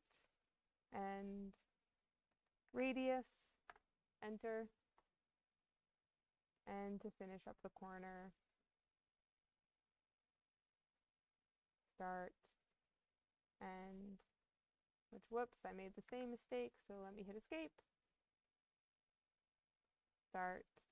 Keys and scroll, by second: 2.6 2, 3.6 Return, 16.0 Escape.